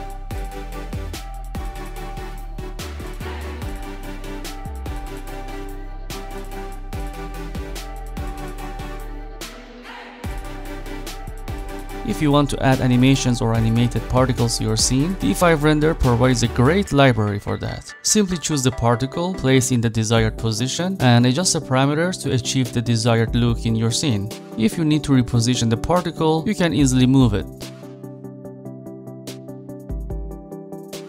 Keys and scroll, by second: 27.2 5, 28.4 Return.